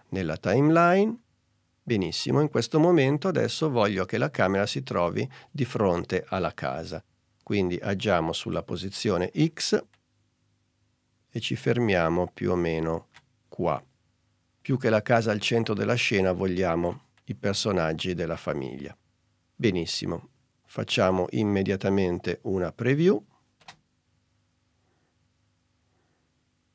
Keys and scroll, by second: 23.6 space.